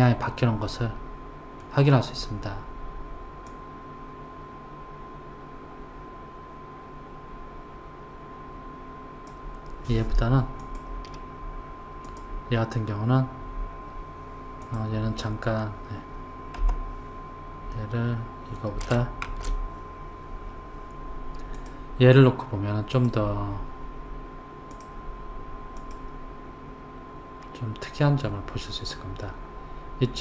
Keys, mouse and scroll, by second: 3.5 click, 10.6 click, 12.0 click, 16.6 Delete, 17.8-19.3 middle drag, 19.3 shift+a, 23.0 click, 24.8 click, 25.8 click, 27.4-28.3 scroll down 1, 28.3-30.2 scroll down 1.